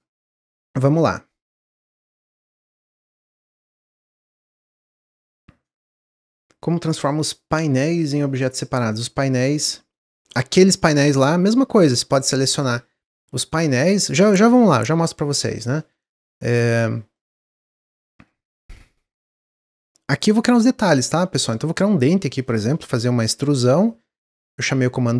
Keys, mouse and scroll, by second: 0.5-0.9 scroll up 1, 0.9-2.2 middle drag, 2.2-2.6 scroll down 2, 2.6-5.7 middle drag, 10.8 Tab, 15.7 middle click, 16.2 Tab, 17.1-20.6 middle drag, 20.6-21.0 scroll up 3, 21.0-23.5 middle drag, 23.5 e.